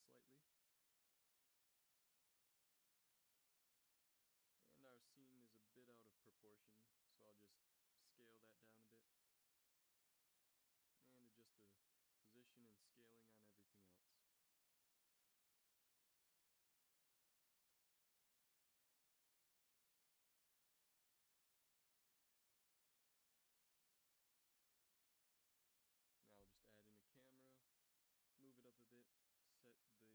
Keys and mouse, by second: 1.5-2.9 middle drag, 2.9 s, 4.2-5.3 middle drag, 6.7-8.7 middle drag, 7.3 s, 8.7 click, 11.5 g, 15.8 s, 18.1-18.5 right drag, 18.5 s, 20.7 a, 22.3 ctrl+s, 24.3 shift+a, 27.1 alt+r, 27.4 alt+g, 28.0 g.